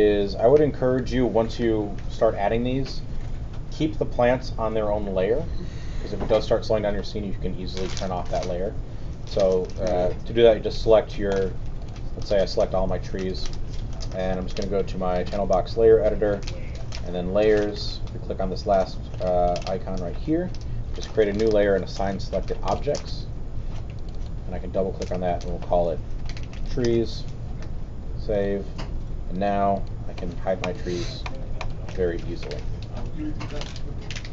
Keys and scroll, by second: 9.3 q, 25.7-27.2 typing.